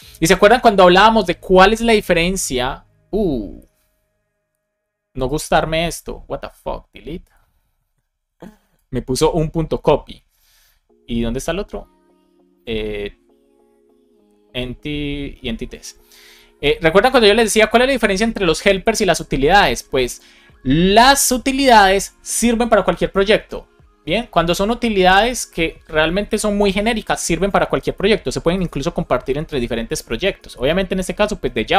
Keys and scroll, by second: 29.3 Right, 29.8 BackSpace, 30.4 BackSpace, 30.9 Return.